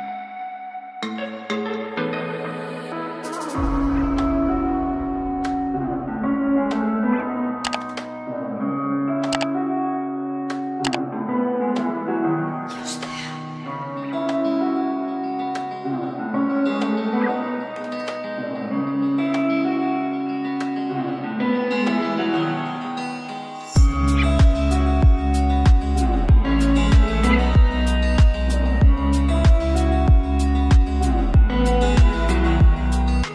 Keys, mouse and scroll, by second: 0.0-2.7 typing, 3.7-4.4 typing, 10.1-30.8 drag, 30.8 right click, 32.1-33.3 drag.